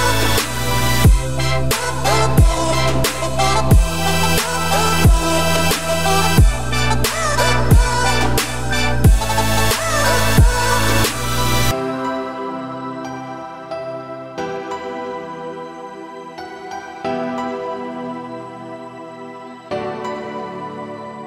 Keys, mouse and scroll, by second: 1.1-1.8 scroll up 1, 1.8 g, 3.7-4.2 scroll up 4, 4.2 scroll down 1, 4.3-5.5 middle drag, 5.5 g, 8.4 `, 9.0 ctrl+s, 9.2 click, 9.8-10.8 scroll up 6, 10.8 click, 11.3 Tab, 12.0 g, 14.2 Tab, 14.4 click, 14.6-15.0 scroll down 4, 15.0 ctrl+s, 15.3-18.3 scroll down 4, 20.1 click.